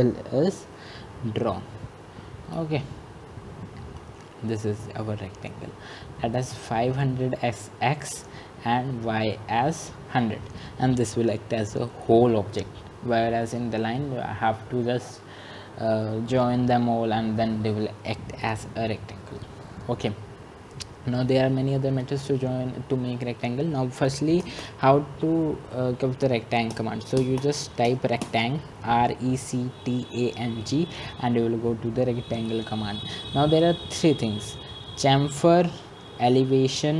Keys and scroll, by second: 24.7 Escape, 26.7-27.4 typing.